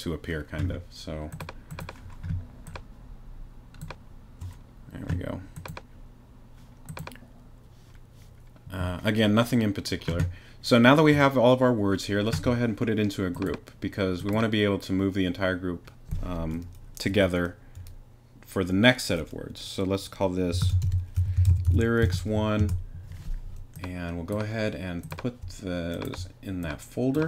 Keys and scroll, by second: 20.4-22.2 typing, 22.6 Return.